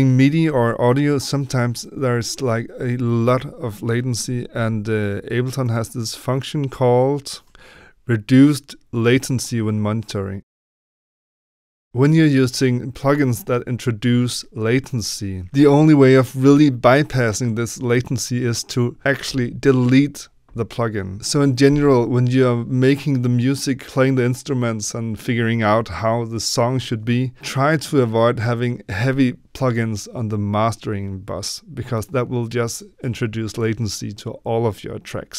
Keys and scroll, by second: 4.4 F11.